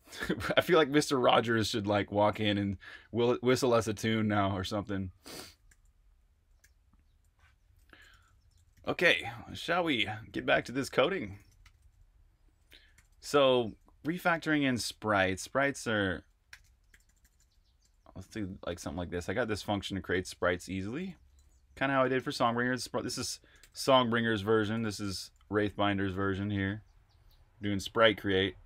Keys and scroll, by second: 0.0-0.4 typing, 5.6-28.6 typing.